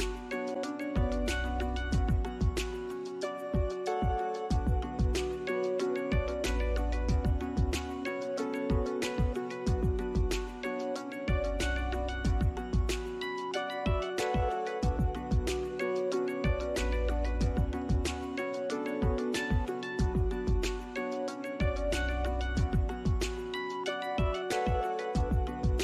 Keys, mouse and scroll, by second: 2.6 ctrl+shift+click, 3.2 ctrl+shift+scroll down 1, 3.5 alt+click, 4.5 alt+middle click, 5.0-5.6 scroll down 2, 5.7 alt+click, 6.5 scroll up 1, 7.0 alt+click, 7.4 alt+middle click, 8.1 ctrl+click, 10.2 middle click, 11.6 alt+scroll up 1, 15.5 scroll up 1, 21.3-21.7 scroll down 1, 22.4 alt+middle click, 23.4 alt+middle click, 25.3 scroll up 1, 25.7 alt+middle click.